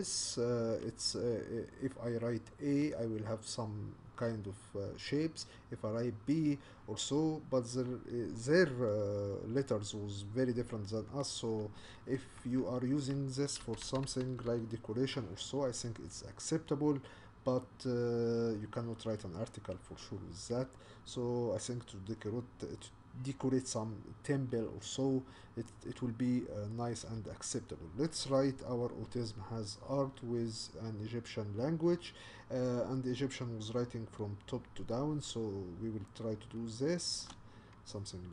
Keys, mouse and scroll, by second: 12.4 Tab, 13.6 BackSpace, 13.9 BackSpace, 14.1 BackSpace, 14.4 BackSpace, 37.2 shift+a.